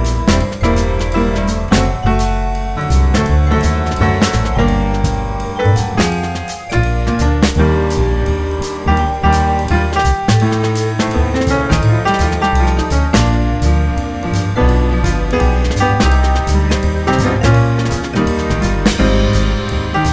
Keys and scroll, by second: 0.3 F4, 2.6 ctrl+z, 5.7 F4, 10.0 F4, 13.4 F4, 15.9 F4, 18.2 F4, 19.3 F4.